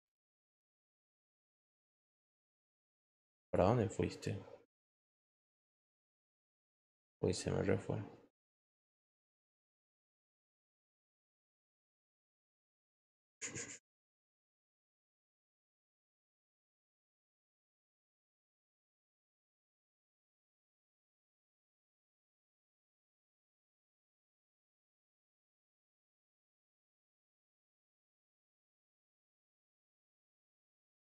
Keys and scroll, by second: 12.2 ctrl+t.